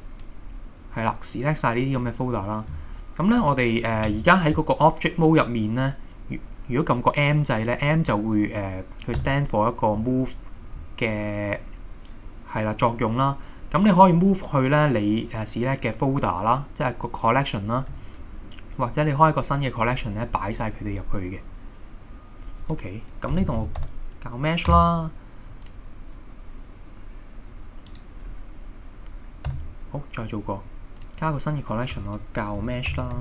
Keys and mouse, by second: 9.2 m, 18.0 m, 28.1 right click, 29.5 m.